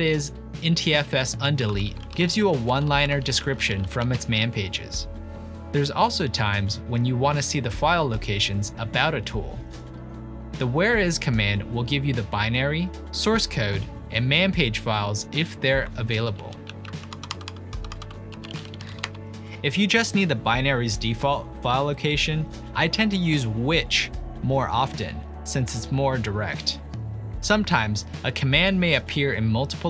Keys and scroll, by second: 1.2-5.4 typing, 12.2 typing, 16.4 ctrl+p, 16.7 ctrl+a, 17.1 Delete, 17.3 Delete, 17.5 Delete, 17.6-19.6 typing, 20.6 typing, 24.1-27.2 typing.